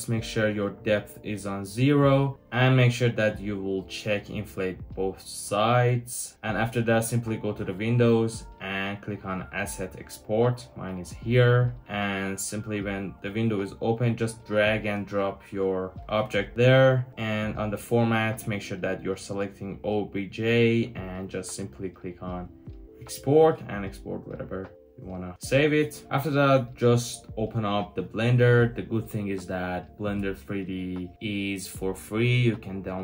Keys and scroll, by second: 26.1 Return, 26.1 typing.